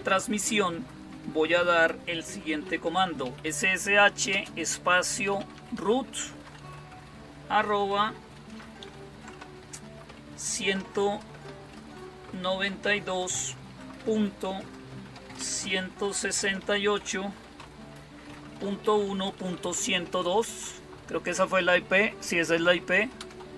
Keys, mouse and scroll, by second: 2.9-6.1 typing, 8.7 typing, 11.6-12.7 typing, 14.2 typing, 15.4 typing, 16.5-19.9 typing, 23.1 Return.